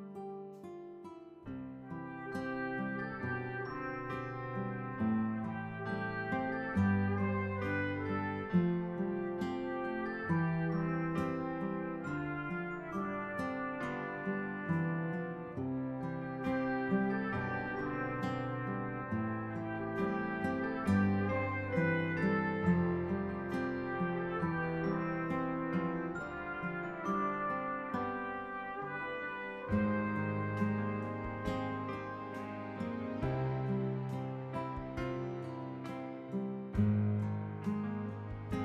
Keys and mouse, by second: 1.4 ctrl+d, 2.2 click, 5.4 ctrl+d, 5.9 ctrl+d, 7.1 click, 9.5 click, 10.0-11.8 typing, 13.5 click, 13.9-15.4 typing, 16.5 click, 18.3 click, 18.6-20.2 typing, 21.3 click, 21.5-23.2 typing, 24.3 click, 27.9 click, 28.6-30.5 typing, 31.8 click, 32.2-32.8 typing, 34.9 click.